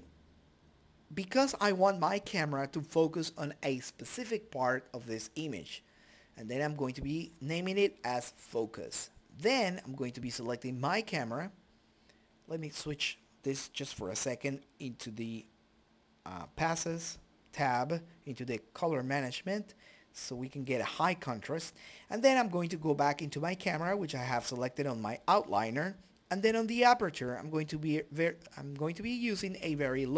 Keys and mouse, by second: 0.2 KP_0, 2.6 shift+z, 8.2-9.5 drag, 10.1-11.6 drag, 12.0 click, 14.1 click, 18.4 ctrl+s, 22.3 click, 22.5 click, 23.1 click, 26.3 click, 27.5 click, 28.5 click.